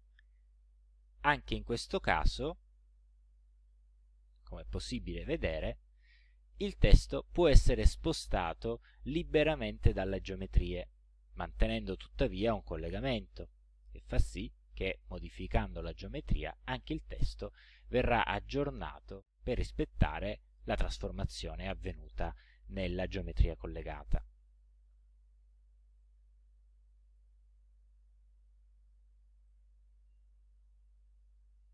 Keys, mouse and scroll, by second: 0.0-4.6 drag, 5.1-6.2 middle drag, 12.1 click, 12.9 click, 14.3 click, 26.0-27.4 drag, 29.5 click.